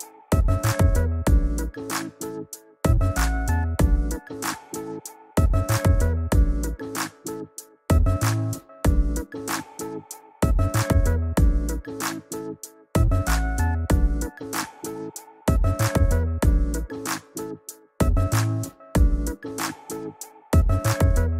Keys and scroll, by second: 0.6 ], 4.4 [, 13.3 [.